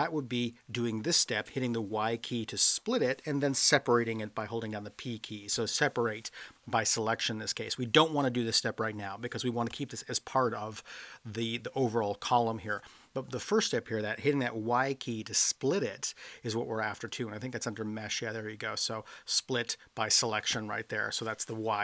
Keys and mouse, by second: 4.6 p, 17.1-21.8 drag.